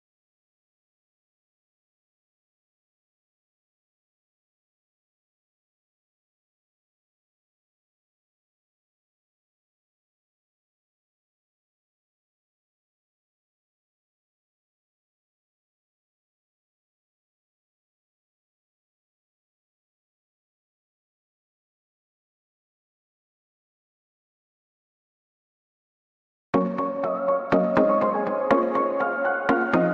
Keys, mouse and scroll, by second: 0.0 middle click, 0.7 scroll down 6, 1.1 middle click, 1.4 scroll up 2, 2.0 scroll down 3, 2.2 middle click, 3.1 scroll down 3, 4.7 scroll down 6, 4.8 middle click, 5.2 click, 5.4 scroll up 1, 5.5 middle click, 6.4 scroll up 1, 6.6 middle click, 8.3 click, 8.8 scroll down 2, 9.1-10.2 scroll up 19, 9.5 middle click, 11.0 click, 13.3 scroll down 3, 13.4 middle click, 13.8 click, 14.0 scroll up 1, 14.1 middle click, 14.6 scroll up 3, 14.8 middle click, 15.6 scroll down 2, 15.7 middle click, 16.0 scroll up 1, 16.1 middle click, 16.3 click, 18.1 scroll down 2, 18.2 middle click, 18.6 shift+middle click, 19.1-19.4 scroll down 9, 20.0 click, 20.0-20.7 scroll down 2, 25.4 scroll down 1, 26.2 click, 26.2-27.3 scroll down 12, 28.6 scroll down 1, 28.7 middle click, 28.9 click, 29.1 shift+middle click, 29.3 scroll up 8, 29.5 middle click, 29.8 shift+middle click.